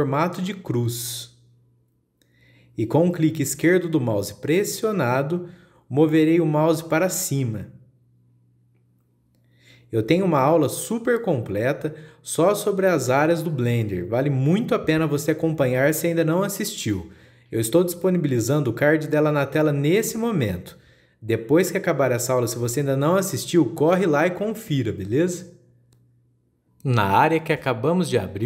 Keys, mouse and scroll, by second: 7.3-10.5 drag, 24.0-27.0 drag, 27.0-28.4 scroll up 2.